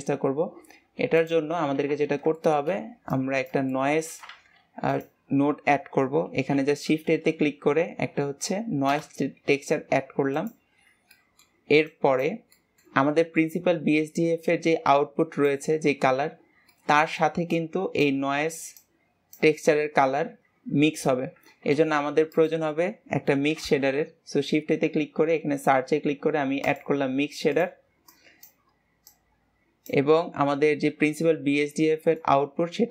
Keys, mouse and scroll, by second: 1.5 click, 3.5-17.9 drag, 19.1-28.5 drag, 29.4-32.9 drag.